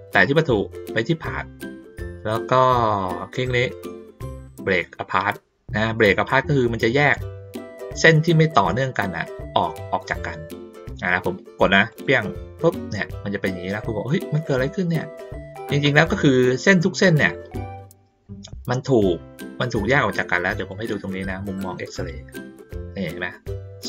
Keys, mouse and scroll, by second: 1.1 click, 11.9 click, 20.6 click, 21.9 click.